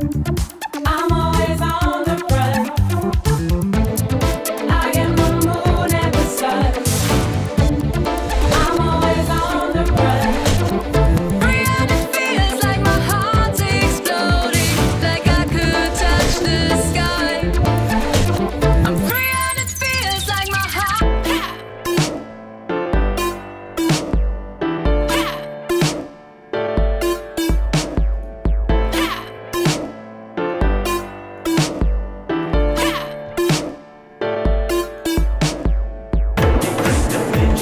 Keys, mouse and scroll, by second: 0.0 click, 2.3 click, 3.9 click, 4.5 Delete, 5.3 middle click, 6.1 click, 6.8-9.5 drag, 10.7 click, 11.3 Delete, 12.9-13.7 drag, 16.8 click, 19.4 ctrl+click, 19.9 ctrl+click, 27.2 ctrl+right click, 28.1 ctrl+click, 30.4 ctrl+click, 31.3 click, 32.3 click, 32.5 click, 33.5 click, 34.9 click, 36.6 click.